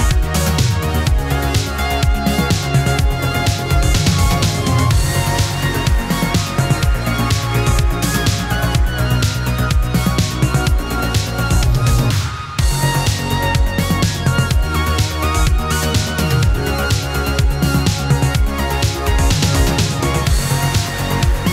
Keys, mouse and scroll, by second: 2.9-6.0 drag, 10.5 click, 11.8-14.6 drag, 16.8-18.3 drag, 18.3 click, 19.5-21.5 drag.